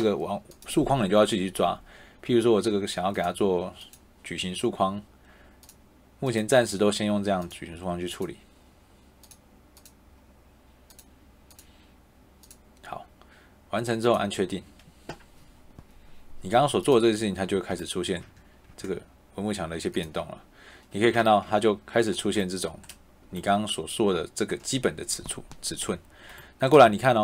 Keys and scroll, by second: 17.6 Caps_Lock, 18.2 d, 21.1 shift+Caps_Lock, 21.3 shift+Caps_Lock, 26.7 Escape.